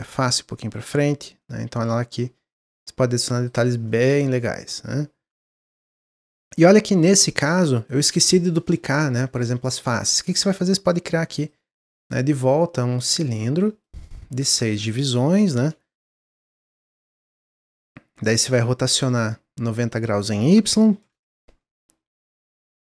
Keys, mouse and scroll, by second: 1.4-3.1 middle drag, 3.1-3.4 scroll down 1, 3.4 click, 3.8-6.4 middle drag, 6.4 click, 6.7 Tab, 6.9 middle click, 7.2 scroll down 1, 7.4 Tab, 7.6-8.1 middle drag, 8.1 click, 8.7 click, 9.4-10.0 middle drag, 10.0 click, 10.5 drag, 11.3-13.6 drag, 13.6 middle click, 14.5-17.0 drag, 17.0-20.0 middle drag, 20.0-22.9 drag.